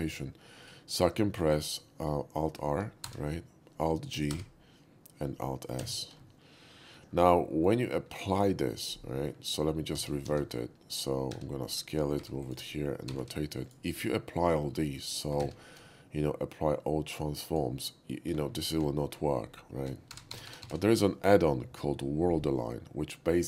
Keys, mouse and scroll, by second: 0.6 right click, 1.4 click, 3.0 alt+r, 4.3 alt+g, 5.8 alt+s, 7.0 middle drag, 7.5 shift+middle drag, 9.9 ctrl+shift+z, 10.3 ctrl+shift+z, 11.3 s, 11.6 click, 12.2 g, 12.4 click, 13.1 r, 13.2 r, 13.6 click, 14.8 shift+middle drag, 15.4 ctrl+a, 17.5 click, 20.1 alt+t, 20.3 alt+r, 20.5 alt+r, 20.7 alt+r.